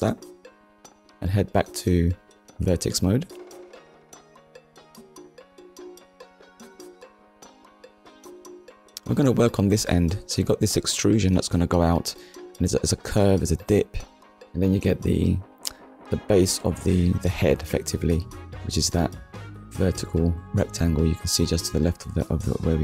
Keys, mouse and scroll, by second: 0.2 click, 1.8 click, 3.0 click, 3.7 shift+middle click, 5.9 KP_1, 7.5 shift+middle click, 8.4-8.7 scroll up 1, 9.4-9.7 scroll up 1, 9.9 shift+middle click, 10.6-11.0 scroll up 1, 14.4 click, 16.3 click, 17.0 click, 19.1 middle click, 20.8 KP_1.